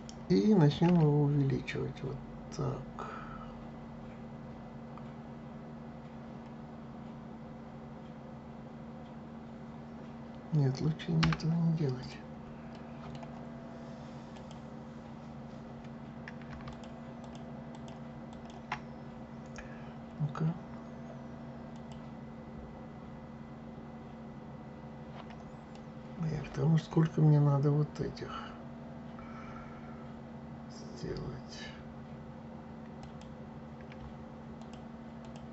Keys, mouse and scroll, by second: 12.0 click, 12.7 middle click, 14.3 click, 16.7 shift+click, 17.2 shift+click, 17.7 shift+click, 18.3 shift+click, 21.7 click, 25.7-28.7 middle drag, 33.0 click, 34.6 shift+click, 35.2 shift+click.